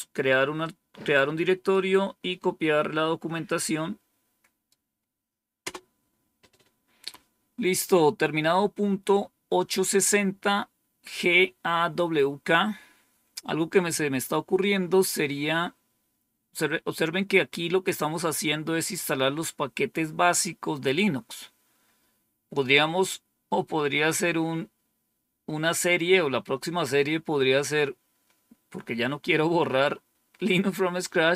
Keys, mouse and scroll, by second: 0.5-1.7 right drag, 3.4-4.6 right drag, 5.6 Return, 8.0-8.8 scroll down 2.